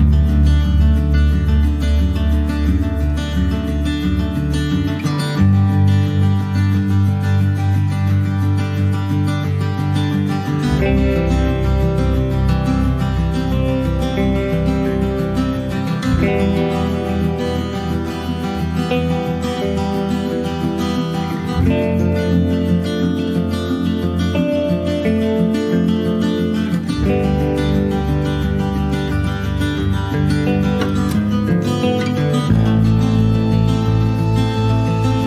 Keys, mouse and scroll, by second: 0.1 shift+middle click, 0.3 shift+scroll up 1, 0.7 shift+d, 4.5 shift+d, 9.1 click, 9.6 click, 10.1 r, 10.9 click, 11.0 r, 11.9 click, 12.1 r, 12.9 click, 13.2 r, 14.0 click, 14.4 click, 14.7 r, 15.5 click, 16.2 ctrl+s, 16.2 click, 16.7 middle click, 17.1 ctrl+s, 17.2 click, 17.5 shift+click, 18.3 shift+click, 18.7 shift+click, 18.9 shift+click, 19.3 middle click, 20.2 ctrl+j, 20.5 click, 21.0 click, 21.3 ctrl+a, 22.0 click, 22.3 click, 22.6 alt+middle click, 22.9 alt+z, 23.1 scroll up 1, 23.3 shift+middle click, 23.6 click, 24.0 Tab, 24.4 click, 25.0-25.3 scroll up 2, 25.3 click, 26.9 s, 28.2 click, 28.9 s, 30.4 click, 30.6 scroll down 1, 30.8 middle click, 31.0 scroll up 1, 31.3 Tab, 31.5 click, 31.7 scroll down 1, 31.9 middle click, 32.3 ctrl+s, 32.4 click, 32.7 ctrl+a, 33.4 middle click, 33.7 click, 33.9 scroll down 1, 34.1 middle click, 34.5 ctrl+s, 34.6 click.